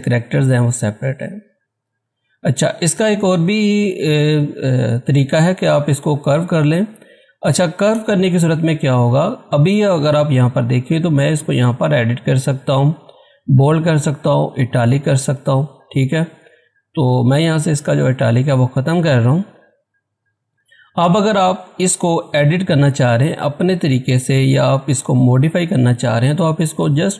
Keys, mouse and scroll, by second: 1.3-2.5 scroll up 1, 2.5-3.9 scroll down 1, 3.9-5.4 scroll up 1, 7.7-8.9 scroll down 1, 8.9-9.5 scroll up 1, 9.5 click, 14.5 click.